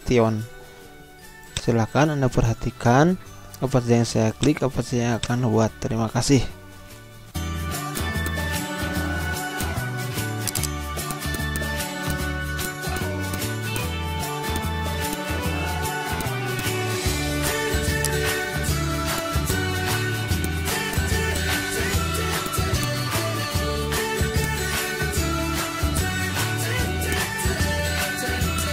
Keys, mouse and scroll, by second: 4.4 click, 7.3 ctrl+End, 8.0 click, 9.3 scroll down 1, 9.6 click, 9.7 z, 9.8 click, 10.4 right click, 11.0 click, 13.6 z, 13.8-16.2 drag, 16.2 click, 18.0 right click, 18.7 click, 19.2 z, 19.4-22.4 drag, 24.4-25.9 drag, 26.6 ctrl+q, 27.1 click, 27.8 Right, 28.5 click.